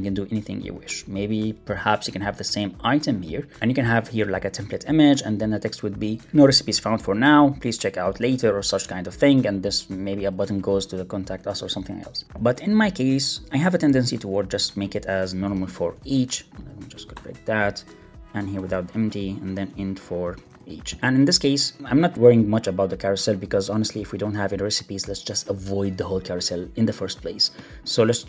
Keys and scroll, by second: 15.7 alt+shift+Right, 16.7 Left, 18.4 super+BackSpace, 20.1 alt+shift+Right, 20.9 Escape, 28.1 super+Left.